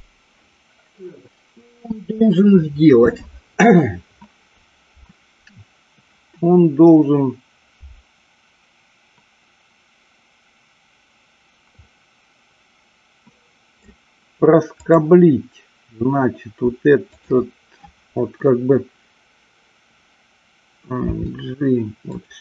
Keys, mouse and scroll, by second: 11.7-14.0 middle drag, 21.1 g, 22.2 click.